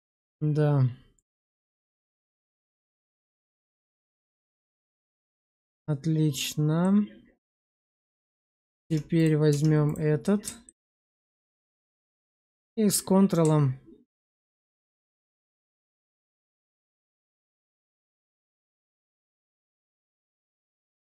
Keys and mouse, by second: 1.1 click, 3.1 middle click, 3.6 shift+z, 4.0-5.0 middle drag, 6.7 middle click, 7.8 Tab, 8.2 click, 8.7 Tab, 9.0 click, 9.4 Tab, 10.1 alt+middle click, 11.0 shift+z, 11.7 shift+middle click, 13.3-14.4 ctrl+drag, 19.7 ctrl+click.